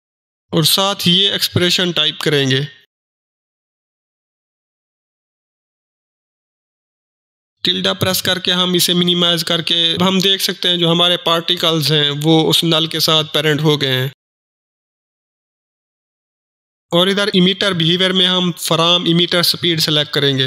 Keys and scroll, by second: 16.8 ctrl+s.